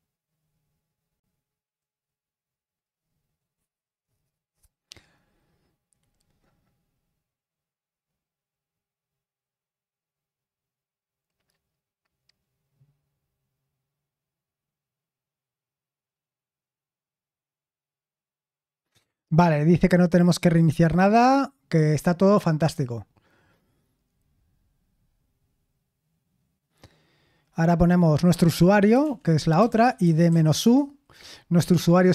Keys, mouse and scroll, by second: 3.2-3.7 scroll down 1, 29.0 super+l, 29.3-30.7 typing.